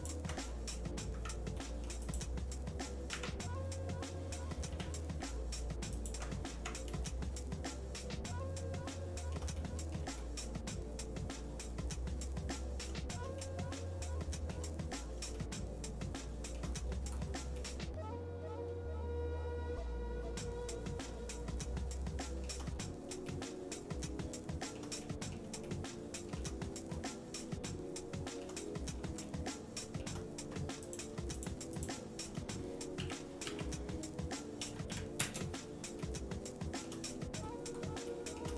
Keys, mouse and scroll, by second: 0.5 middle click, 1.1 Tab, 1.6 middle click, 2.0 click, 3.1 Tab, 4.7 g, 6.5 Tab, 7.1-9.3 shift+middle drag, 9.6 middle click, 10.2-12.8 shift+middle drag, 13.4-14.6 shift+middle drag, 15.4-16.6 shift+middle drag, 16.8-17.5 scroll down 3, 17.6-22.5 shift+middle drag, 22.8 scroll down 1, 23.3-24.8 shift+middle drag, 25.0 middle click, 25.7 shift+middle click, 26.6-27.5 scroll up 4, 27.7 shift+middle click, 28.6-29.2 scroll down 2, 29.2 shift+middle click, 30.8 click, 31.4 shift+click, 33.0 r, 36.0 shift+middle click, 37.1-38.0 scroll up 4, 38.1 shift+middle click.